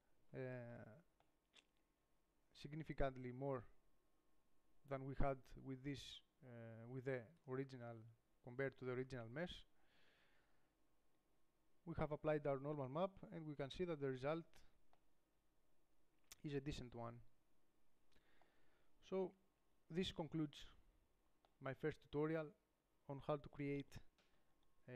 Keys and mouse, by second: 1.7 click, 3.4-6.1 middle drag, 7.1 Tab, 7.7-9.4 drag, 9.4 middle click, 9.8 click, 10.2 Tab, 11.6-15.4 middle drag, 13.8 Tab, 18.4-19.5 middle drag, 19.5 KP_7, 20.8-21.9 middle drag, 24.6-24.9 middle drag.